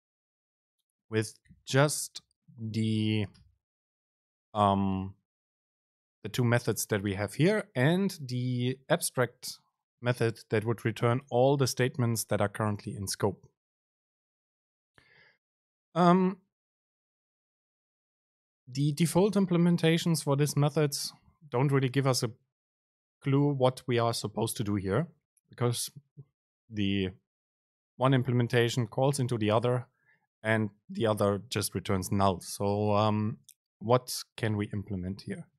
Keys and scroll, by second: 1.7 ctrl+o.